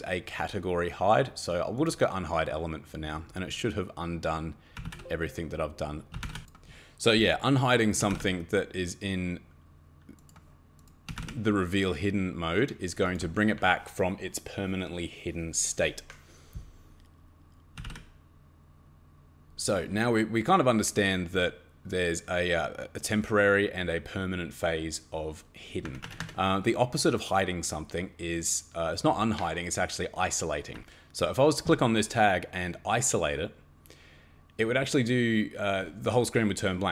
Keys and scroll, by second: 4.5-6.7 typing, 7.7-8.6 typing, 10.8-11.7 typing, 17.5-18.3 typing, 25.8 Escape, 26.0 Escape, 26.2 Escape, 30.8 Escape.